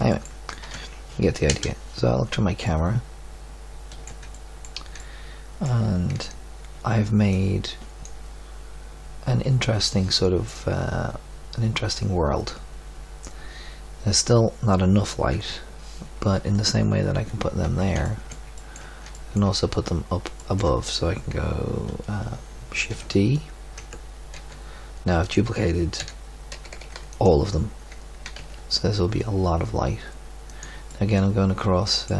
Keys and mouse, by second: 0.6 Tab, 1.4 KP_0, 5.0 middle click, 5.3 middle click, 5.8-6.6 middle drag, 15.4 KP_3, 17.2 z, 22.9 shift+d, 24.3 g, 25.9 r, 28.2 g, 30.8-32.1 middle drag.